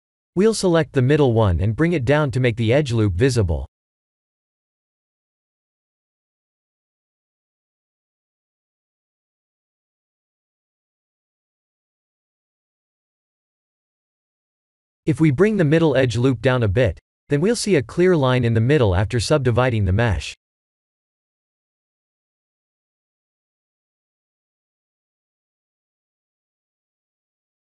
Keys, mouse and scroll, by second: 0.6 ctrl+z, 1.2 ctrl+z, 2.9 ctrl+shift+z, 5.0 ctrl+b, 12.7 2, 13.2 alt+click, 14.5 middle click, 15.6 b, 18.6 g, 22.1 KP_3, 23.1-23.7 scroll down 4, 23.8 shift+middle click, 24.7 s, 26.8 g.